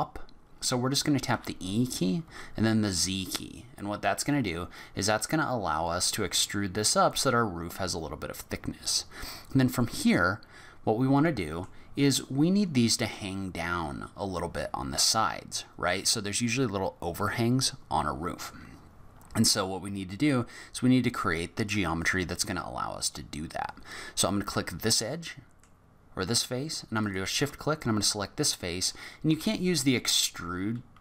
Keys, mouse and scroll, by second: 1.3 e, 9.8 middle click, 14.4 middle click, 22.0 click, 24.2 middle click, 27.0 shift+click, 27.8 middle click, 29.3 e.